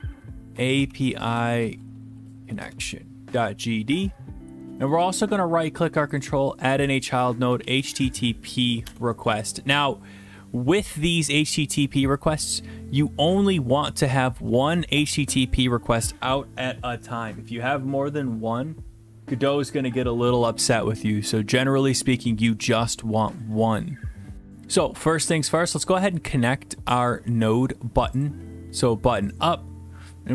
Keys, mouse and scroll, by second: 0.1-2.4 typing, 2.6 Return, 4.9-6.1 right drag, 6.2 click, 7.5-8.0 typing, 8.8 Return, 10.0 typing, 25.6 click, 27.1 click, 28.3 click, 29.4 click.